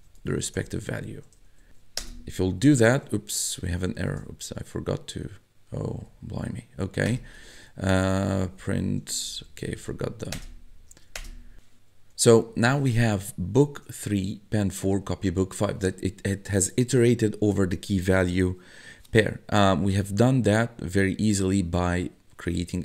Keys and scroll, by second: 0.0-1.7 typing, 2.0 Return, 4.1 Up, 6.1 Up, 7.1 Return, 7.3 Tab, 8.2 Up, 9.3 Left, 9.7 shift+', 10.4 Return, 13.9 1, 15.2 1.